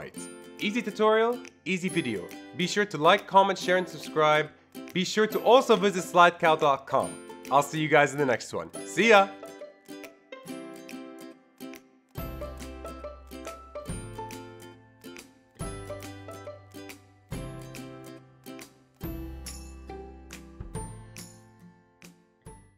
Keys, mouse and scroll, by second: 0.0 shift+Left.